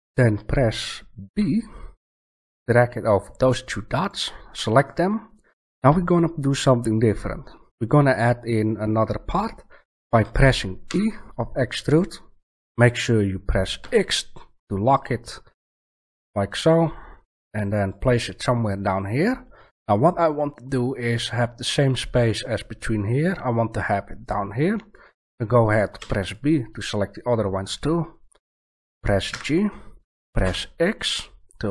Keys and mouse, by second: 1.2 b, 10.8 e, 18.0 click, 19.7-25.9 middle drag, 25.9 b, 29.2 g.